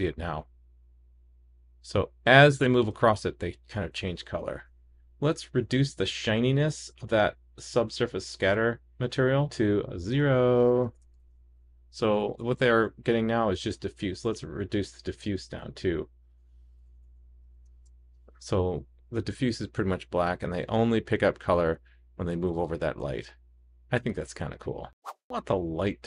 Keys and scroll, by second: 11.1 super+s, 16.8 super+d, 17.1 super+d, 18.2 super+s.